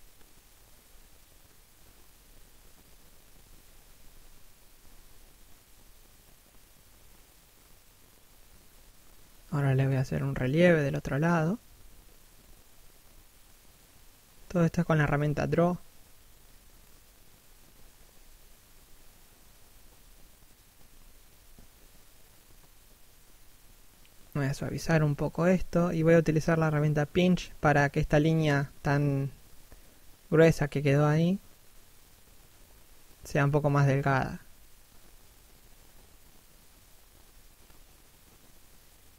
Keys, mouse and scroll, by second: 0.0 f, 0.3 click, 0.7 shift+click, 1.9 middle click, 3.0 shift+click, 4.2 scroll down 1, 4.5 middle click, 6.1-6.5 scroll up 1, 6.5 d, 8.2 click, 8.8 shift+f, 11.6 shift+middle click, 12.1 click, 12.7 shift+middle click, 13.3 click, 14.1 shift+middle click, 14.4 f, 14.6 click, 16.0 shift+middle click, 16.4 f, 16.9 click, 18.3 scroll down 1, 18.5 middle click, 20.3 scroll up 1, 20.6 click, 21.2 scroll up 1, 21.5 s, 21.9 click, 23.8 p, 24.5 click, 24.7 scroll up 1, 25.0 middle click, 25.4 shift+middle click, 25.9 click, 29.4 scroll down 1, 29.6 middle click, 31.0 scroll up 1, 31.2 click, 33.6 scroll down 1, 34.1 middle click, 35.1-35.4 scroll up 1, 35.4 click.